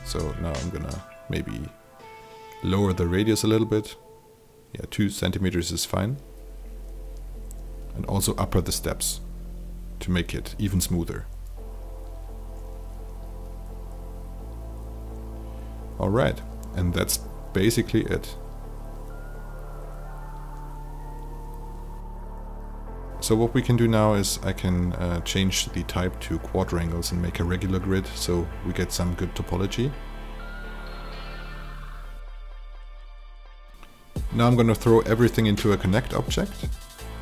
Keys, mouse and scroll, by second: 0.3 click, 3.3 KP_2, 5.0 click, 6.1 KP_2, 8.3 click, 13.1 KP_8, 14.5 alt+click, 19.7 click, 21.0 n, 21.7 f, 24.9 click, 28.2 alt+click, 30.3 alt+right click, 30.8 alt+click, 36.8-37.2 alt+drag.